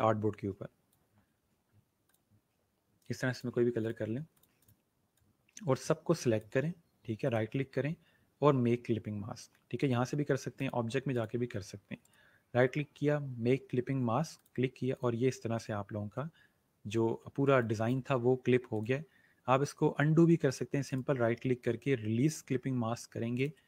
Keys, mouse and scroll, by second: 7.2 right click, 10.5 click, 12.0 right click, 14.3 click, 16.9-17.3 alt+scroll up 2, 17.4 space, 17.6 click, 20.8 right click, 23.3 click.